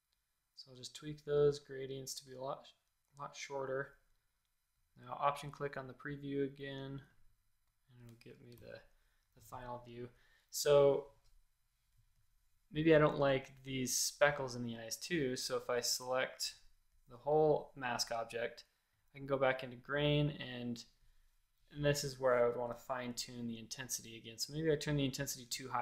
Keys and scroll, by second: 8.5 shift+super+a, 15.8 v, 22.7 super+=.